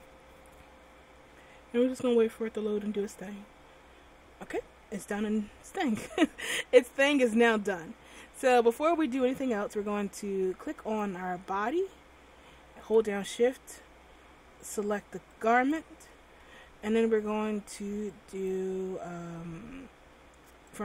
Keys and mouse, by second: 11.0-12.7 right drag, 15.8 right click, 20.1 click.